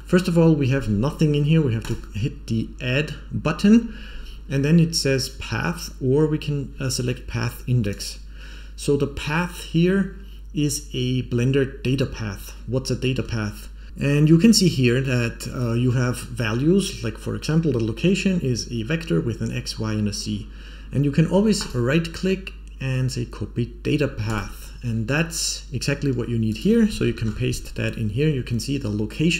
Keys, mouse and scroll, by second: 1.7 click, 5.1-7.9 drag, 13.9 click, 13.9-14.6 scroll up 3, 21.5-24.3 right drag, 26.4-29.3 drag.